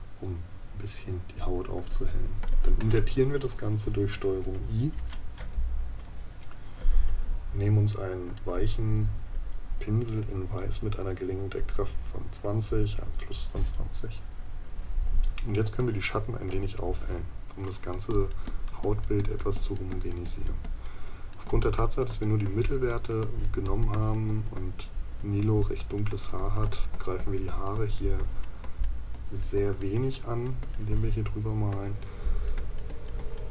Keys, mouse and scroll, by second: 15.8 right click.